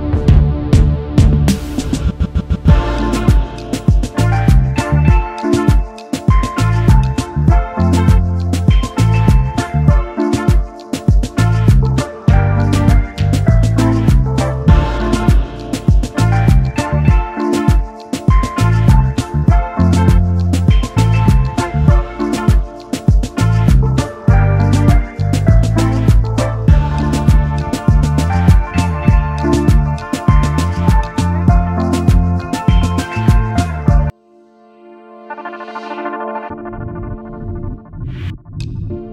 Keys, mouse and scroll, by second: 0.7-1.4 typing, 2.9-3.7 typing, 5.9 alt+scroll down 1, 7.3 right click, 8.5 shift+click, 10.5 double click, 10.7 alt+scroll down 1, 10.9 space, 11.5 right click, 17.4 shift+click, 18.7 double click, 25.3 right click, 27.2 double click, 28.3 ctrl+z, 29.3 shift+click, 29.6 shift+right click, 32.5 right click, 33.6 shift+click, 34.9 double click, 35.2 alt+scroll down 1, 35.3 space, 38.1 double click, 38.4 ctrl+z.